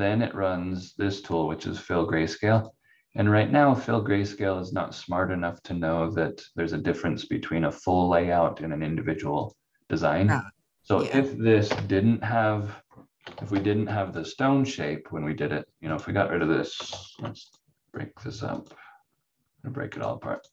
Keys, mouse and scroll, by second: 2.5 click, 3.0-3.6 scroll down 1, 9.4 click, 11.6 Delete, 13.3 ctrl+z, 13.5 ctrl+z, 15.9 click, 16.8 ctrl+z, 18.5 click.